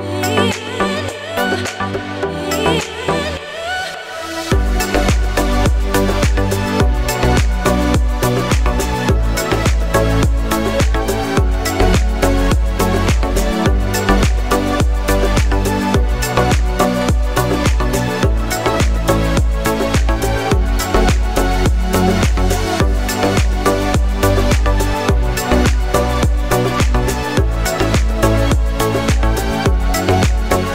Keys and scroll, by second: 0.2 s, 3.3 e, 3.9 z, 8.3 s, 14.3 e, 16.4 s, 23.1 e, 24.5 s, 29.6 e.